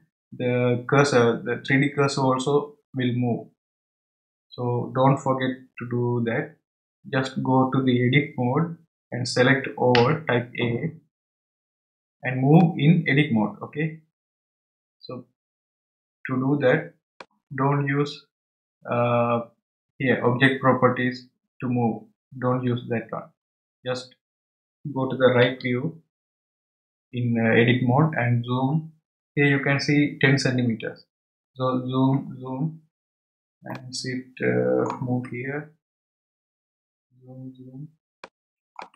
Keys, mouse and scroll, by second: 9.9 a, 12.6-15.6 middle drag, 25.4 KP_3, 26.5 KP_3, 31.8-33.4 scroll up 6, 33.7-35.8 shift+middle drag, 35.8-38.2 scroll up 10, 38.2-38.9 shift+middle drag.